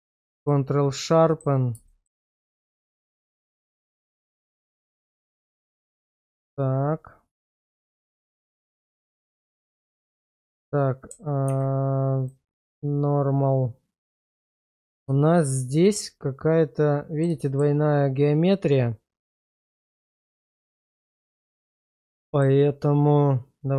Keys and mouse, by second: 1.1 middle click, 1.9 shift+middle click, 3.2 middle click, 4.9 g, 5.7 right click, 7.4 Tab, 8.3 shift+middle click, 8.7 middle click, 9.9 Tab, 10.2 middle click, 11.5 alt+v, 13.1-14.6 middle drag, 15.2 shift+middle click, 16.0-17.3 middle drag, 17.5 shift+middle click, 20.7-21.8 middle drag, 22.1-22.4 shift+middle drag.